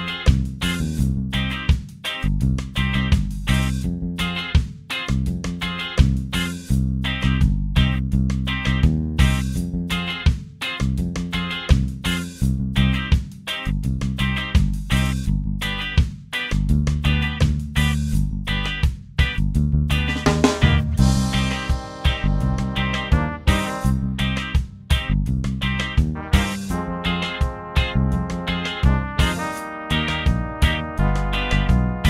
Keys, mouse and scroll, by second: 1.2 click, 3.5 click, 5.4 click, 7.0-9.1 ctrl+shift+drag, 10.4 click, 12.4 click, 13.4 click, 14.7 2, 15.2 0, 18.1 Return, 21.1 click, 22.9 ctrl+d, 26.7 shift+click, 28.0 click, 28.7 click, 30.5 click, 31.1 shift+click.